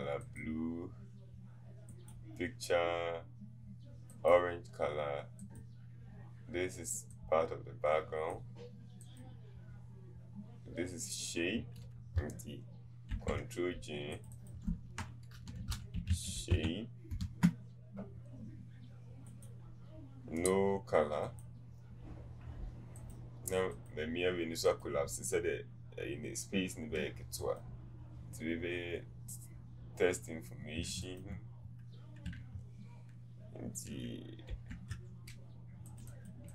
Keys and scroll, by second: 16.4 typing.